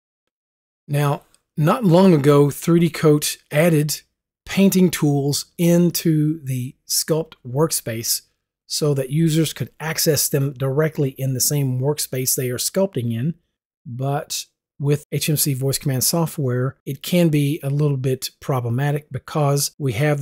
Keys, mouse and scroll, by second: 1.0 click.